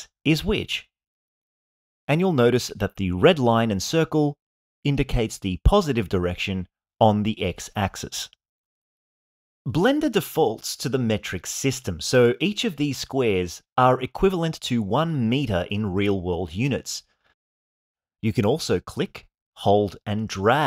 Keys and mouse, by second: 1.4-7.4 middle drag, 18.7-20.6 drag.